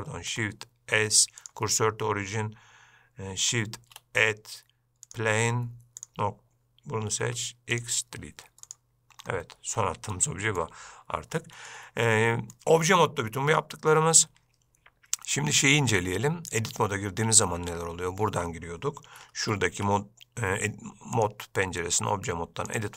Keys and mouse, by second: 0.3 shift+s, 4.0 shift+a, 7.4 x, 8.9 drag, 10.3-10.8 middle drag, 11.6-11.9 shift+middle drag, 12.3-12.7 middle drag, 14.0-14.5 middle drag, 16.7-22.9 drag.